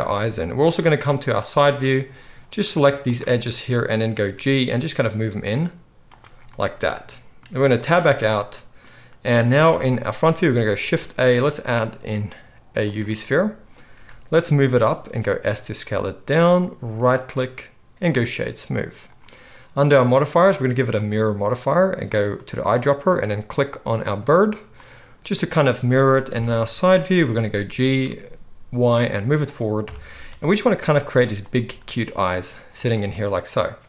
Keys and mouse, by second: 1.4 click, 1.4 middle click, 2.9 shift+click, 3.1 shift+middle click, 3.7-8.9 right drag, 4.3 g, 7.3-8.5 middle drag, 7.9 Tab, 9.6 KP_1, 10.8-20.0 shift+right drag, 10.8 shift+a, 13.9 g, 15.0 s, 20.0-22.5 middle drag, 22.5-24.6 right drag, 25.1-33.7 middle drag, 26.3 KP_3, 27.1 g, 29.8 KP_1, 30.6 s, 31.6 g, 33.7 right click, 33.8 middle click.